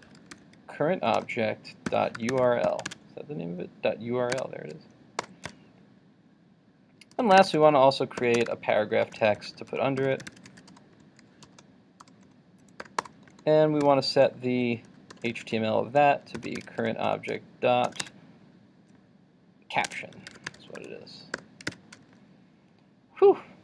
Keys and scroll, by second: 2.9 super+Tab, 18.0 super+Tab, 21.7 super+s.